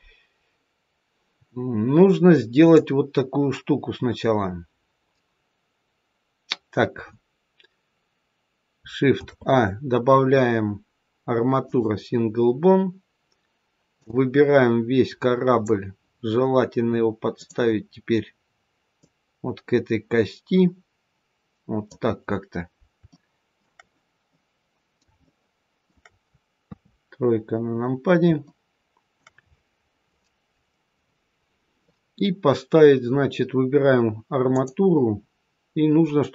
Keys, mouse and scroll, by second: 0.9-1.7 scroll down 1, 2.5 click, 2.5-4.0 scroll down 1, 9.0 shift+a, 13.9 click, 17.2 click, 18.9 click, 23.0 shift+middle click, 24.2 middle click, 25.1 shift+middle click, 26.5 KP_3, 27.2-28.1 scroll up 2, 28.3 shift+middle click, 34.4 click.